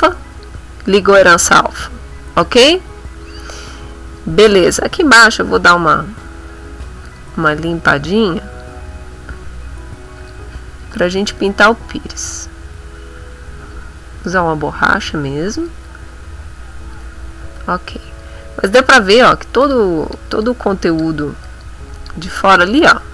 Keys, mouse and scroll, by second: 0.3 click, 3.8 middle click, 4.4 middle click, 5.7 right click, 7.0 click, 8.3 click, 10.2 click, 10.9 shift+click, 11.6-15.8 shift+drag, 16.1 click, 17.6 shift+click, 18.2 shift+middle click, 19.6 click, 20.0 click, 20.8 click, 21.4 click, 21.8 click, 22.6 click, 23.0 click.